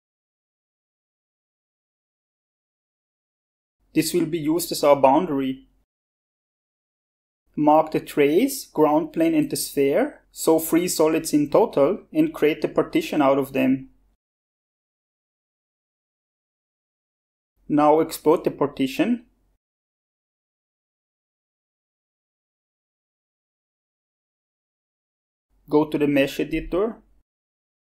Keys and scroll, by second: 0.2-1.8 typing, 4.4-6.1 typing.